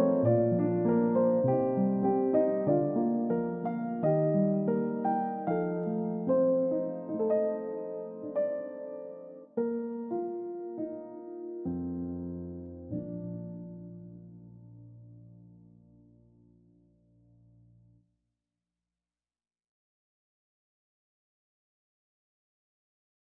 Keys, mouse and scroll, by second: 0.1 double click, 0.3-0.7 scroll up 1, 1.2 scroll down 1, 11.0-12.2 scroll up 1, 12.2 middle click, 13.5 space, 18.0 scroll down 1, 19.0 double click.